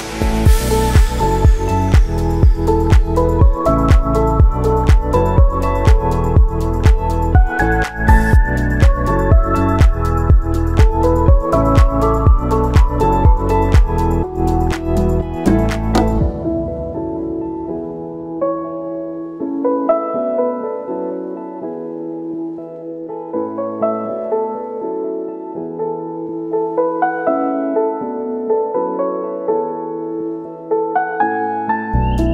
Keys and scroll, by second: 5.1 1, 6.6-7.5 typing, 10.2 ctrl+c, 11.1 ctrl+v, 11.9 ctrl+c, 12.1 ctrl+v, 14.2 F9, 15.6 space, 20.8 space, 21.8 b, 24.1 space, 28.8 r.